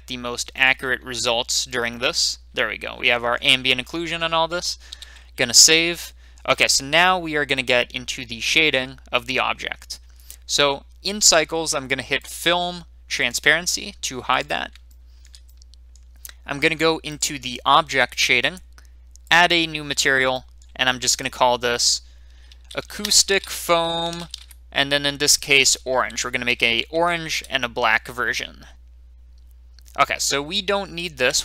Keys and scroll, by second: 4.9 ctrl+s, 22.4-24.3 typing, 25.6-26.9 typing, 27.3 Return.